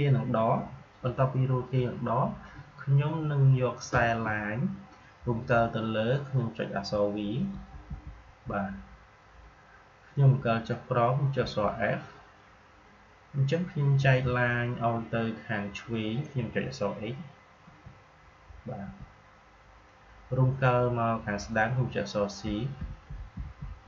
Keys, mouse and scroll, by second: 9.1 typing, 11.3 f, 17.3-18.0 typing, 22.1-23.8 typing.